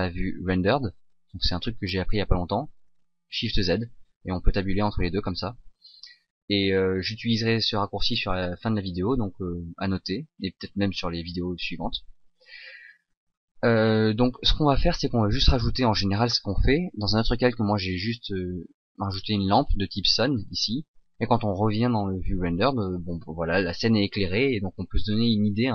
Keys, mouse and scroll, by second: 0.6 shift+z, 4.7 shift+z, 5.1 shift+z, 14.4 shift+z, 17.8 shift+click, 18.0 shift+click, 21.9 shift+z.